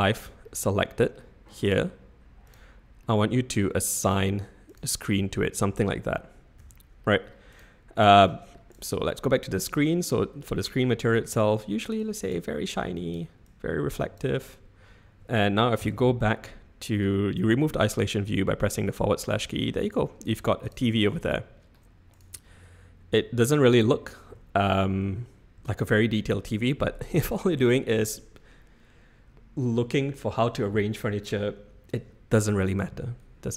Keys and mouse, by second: 0.4 middle click, 2.5 click, 3.0 middle click, 4.0 click, 4.6 click, 5.5 click, 6.6 ctrl+z, 7.0 click, 8.2 middle click, 12.0 click, 12.7 click, 13.1 middle drag, 13.4 click, 15.8 /, 17.4 click, 19.3-19.7 shift+middle drag, 20.5 Tab, 25.0 n.